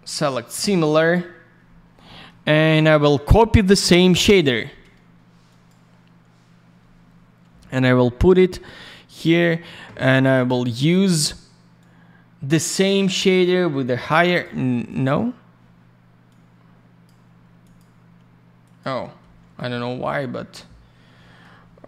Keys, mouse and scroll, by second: 0.6 click, 0.7 click, 1.6 scroll down 1, 2.0 middle click, 2.5 scroll up 1, 3.1 shift+click, 5.4 click, 5.6 click, 8.1 middle click, 8.7 scroll up 1, 10.3 click, 10.4 click, 11.7 click, 14.8 click, 15.0 click, 16.2 click, 17.6 alt+click, 17.7 alt+click, 18.6 alt+click, 18.7 alt+click, 19.2 alt+й, 19.7 alt+middle click, 21.5 scroll down 1.